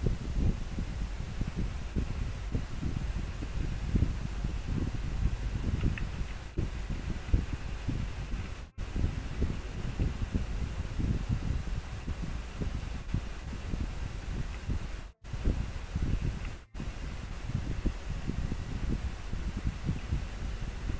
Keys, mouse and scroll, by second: 6.3 scroll down 1, 7.5 scroll up 1, 10.6 scroll up 1, 14.6 scroll down 1, 15.6 scroll up 1, 20.1 scroll down 1.